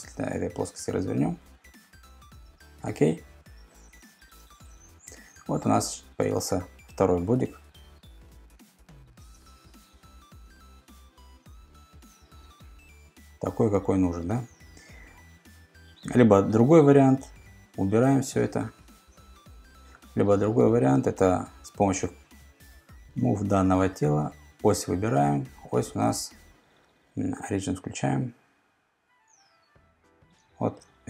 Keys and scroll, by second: 15.4 ⟲, 17.1 super+z.